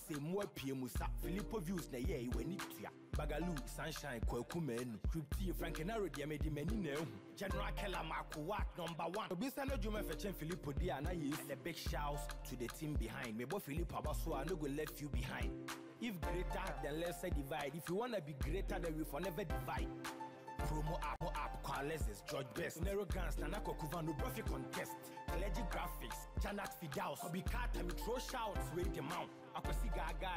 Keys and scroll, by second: 21.0 Delete.